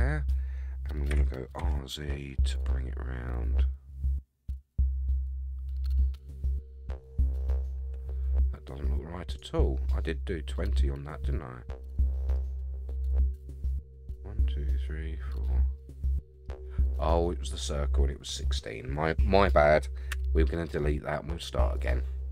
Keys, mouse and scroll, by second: 1.1 r, 9.8-10.2 scroll down 3, 10.5-12.3 middle drag, 12.5-13.0 scroll down 4, 13.1 middle click, 15.8 middle click, 17.4-18.9 scroll up 6, 20.1 x.